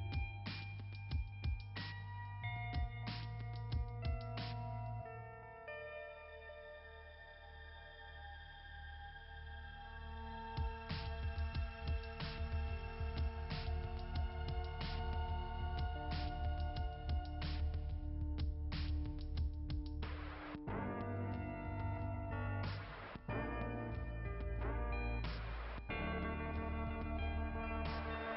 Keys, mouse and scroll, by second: 4.1 click, 4.2 click, 4.7 click, 24.9 click, 25.2 click.